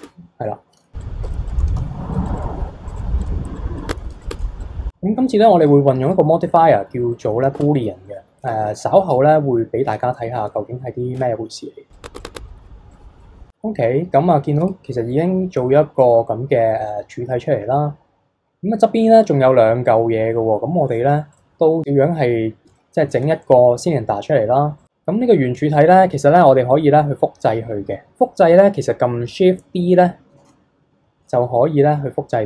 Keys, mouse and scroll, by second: 0.0 Tab, 1.2-4.4 typing, 1.5 click, 2.3 click, 2.9 click, 3.0 click, 3.5 click, 3.9 Tab, 4.2 click, 4.3 Tab, 4.6 click, 6.1 click, 6.4-7.1 middle drag, 7.1 scroll up 1, 7.2 middle click, 7.6 Tab, 7.8 scroll down 1, 8.1-8.4 middle drag, 8.4 KP_3, 8.8-9.3 middle drag, 9.3-10.0 scroll up 2, 10.0-11.1 middle drag, 11.1 KP_3, 11.9 click, 12.0 Tab, 12.1 Tab, 12.2 click, 12.3 Tab, 12.5 middle click, 12.6 KP_3, 12.9 click, 13.1 scroll down 1, 13.2-14.6 middle drag, 14.6 KP_3, 21.3 click, 22.8-24.8 shift+middle drag, 24.8 click, 30.4 shift+d.